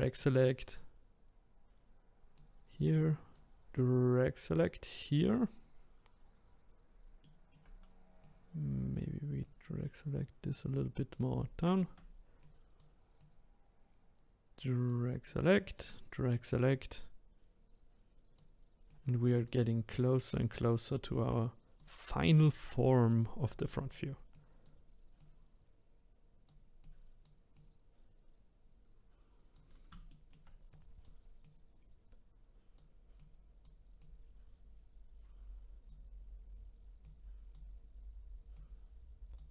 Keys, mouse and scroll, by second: 0.1 click, 2.9 click, 3.7 click, 6.5-7.2 scroll up 2, 7.2-8.2 shift+middle drag, 8.2 click, 9.4 click, 11.6 shift+middle click, 12.4 click, 13.2 click, 15.2-16.4 drag, 18.9 click, 19.9-21.3 drag, 22.4 click, 23.6 shift+middle click, 23.8 middle click, 24.3 click, 25.2-26.9 drag, 27.5 click, 30.1 shift+middle click, 30.7-33.2 drag, 34.0 click, 37.0 click, 38.5 click.